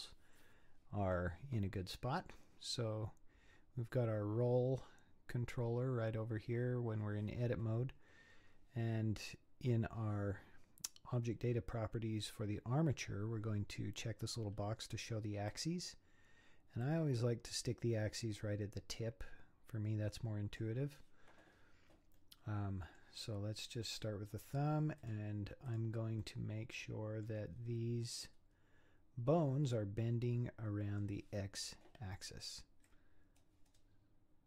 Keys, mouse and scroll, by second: 15.5 click, 16.8-20.0 drag, 22.2-23.6 middle drag, 23.6 click, 24.0-25.0 middle drag, 25.0 click, 25.7 click, 26.2-27.6 middle drag, 27.6-28.1 scroll up 6, 28.1-30.3 middle drag, 30.4 middle click, 32.9-34.4 drag.